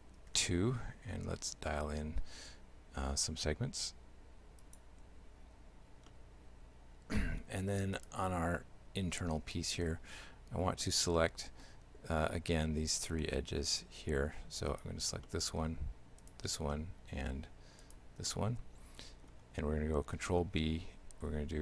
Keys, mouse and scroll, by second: 5.5 Tab, 6.1 shift+middle click, 8.0 right click, 9.4 Tab, 10.4 Tab, 10.9 shift+middle click, 14.1 Tab, 14.7 right click, 15.3 shift+middle click, 16.2 shift+right click, 16.8 shift+middle click, 17.9 shift+right click, 18.3 shift+middle click, 20.2 ctrl+b.